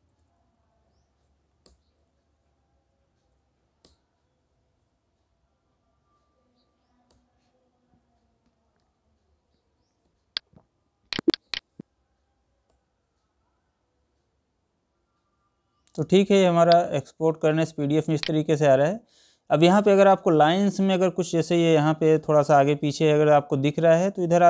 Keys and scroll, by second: 2.8 Up, 7.8 Escape.